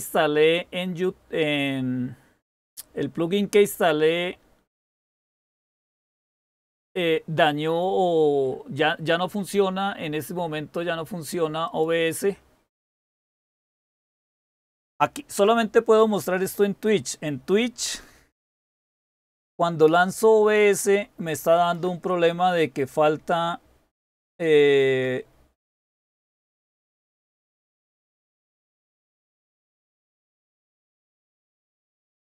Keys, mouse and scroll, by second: 18.7 ctrl++, 19.4 ctrl++, 19.8 ctrl++, 20.1 ctrl++.